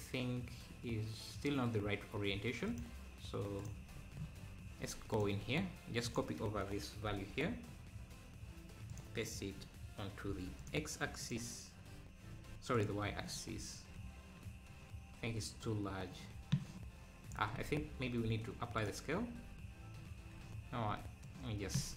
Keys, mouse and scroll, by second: 2.7-3.9 drag, 5.1-9.1 drag, 9.2-13.3 drag, 13.3-13.7 scroll down 3, 15.7-17.7 shift+drag, 17.7 ctrl+z, 18.1 ctrl+a, 21.2-21.9 shift+drag.